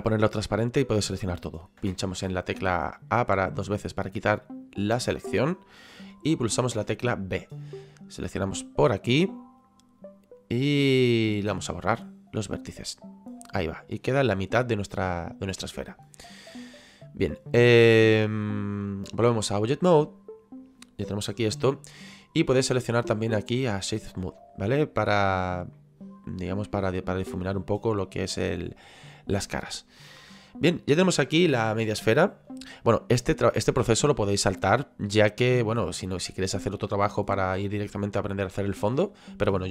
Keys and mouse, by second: 7.7 click, 11.6 Delete, 12.8 click, 17.3 click, 19.7 click, 24.4 click, 25.7 middle click, 29.5 middle click, 30.3 middle click, 36.2 middle click.